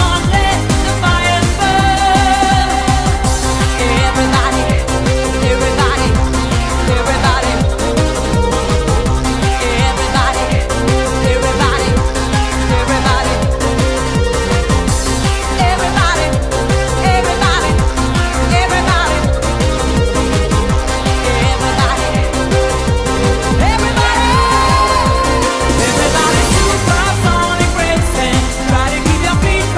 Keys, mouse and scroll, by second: 9.1 click, 11.3 click, 22.2 click, 24.5 click.